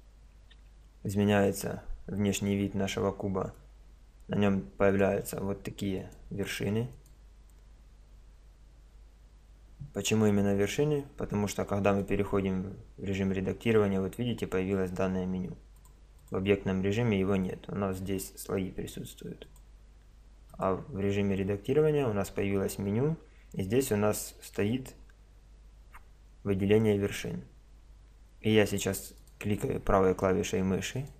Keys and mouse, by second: 1.9-4.9 middle drag, 4.9-8.6 right drag, 8.6 middle click, 13.3 click, 16.1 click, 17.0 middle click, 19.5-21.3 drag, 29.2-31.1 right drag.